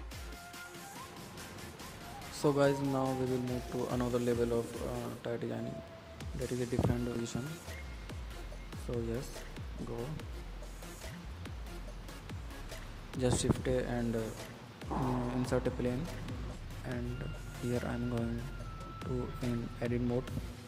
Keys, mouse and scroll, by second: 0.7 n, 1.2-2.2 middle drag, 2.2 shift+a, 3.0 click, 3.3 KP_1, 3.9 shift+a, 5.0 drag, 5.4-7.0 drag, 7.3 s, 10.2 s, 13.5-14.6 middle drag, 14.6 g, 15.3-15.8 middle drag, 15.8 click, 16.3 middle click, 17.0 click, 17.8-18.6 middle drag, 18.8 click, 18.9-20.3 middle drag, 20.3 Tab, 20.4 middle click.